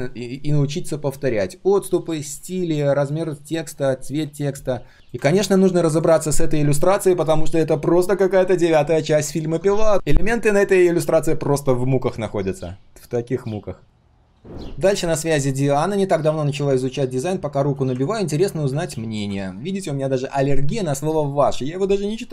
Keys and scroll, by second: 7.1 ctrl+shift+3.